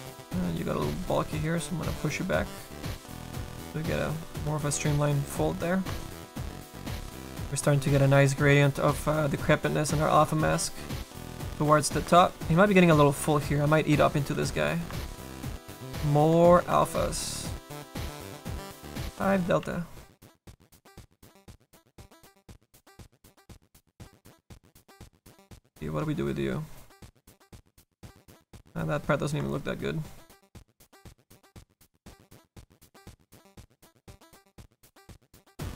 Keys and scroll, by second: 19.6 s, 20.5 s, 22.0 s.